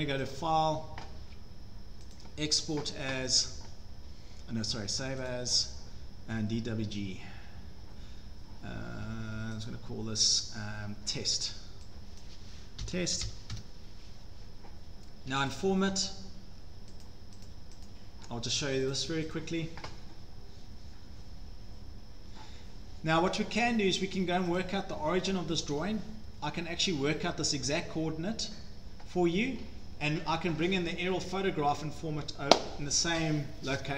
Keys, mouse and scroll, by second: 0.3 click, 2.2 click, 5.3 click, 9.7 click, 12.2 click, 12.6-14.7 typing, 15.5 click, 17.1 click, 17.5 click, 17.9 click, 18.9 click, 19.4 click, 22.6 scroll down 2, 24.6 scroll down 1, 25.3 click, 25.3 scroll down 1, 25.4-26.0 scroll, 26.5 scroll, 29.6-30.3 scroll, 30.3 scroll down 8, 32.5-33.4 scroll.